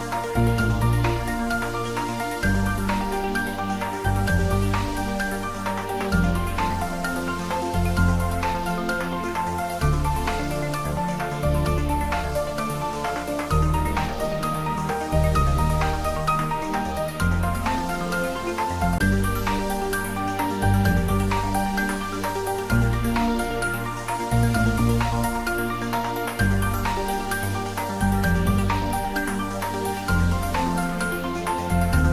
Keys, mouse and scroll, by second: 0.9-2.0 scroll up 1, 2.0 click, 2.9 scroll down 1, 4.5 Tab, 5.6 click, 6.3 Tab, 6.9 click, 7.9 Tab, 9.7-11.6 drag, 13.0 `, 13.4 3, 16.0-20.8 drag, 20.8-23.5 scroll up 1, 24.0 alt+shift+click, 31.5-32.1 scroll down 1.